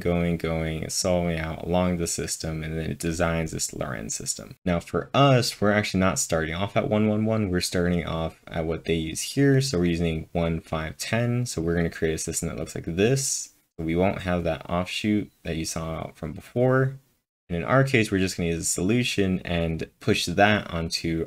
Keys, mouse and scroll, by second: 7.1-12.4 drag, 9.7-10.4 typing, 17.0-17.8 typing, 17.3-18.5 drag, 18.5-21.2 drag.